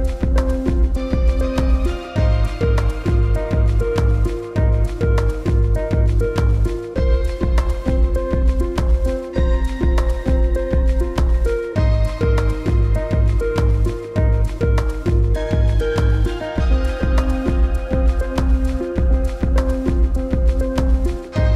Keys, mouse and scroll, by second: 0.4-2.9 scroll up 1, 3.5 click, 5.0 scroll down 1, 5.7 click, 8.0-8.8 scroll down 1, 9.8-10.8 scroll down 1, 11.3-11.6 scroll down 1, 13.7-15.4 scroll down 1, 15.9-16.9 scroll down 1, 17.6-18.0 scroll down 1.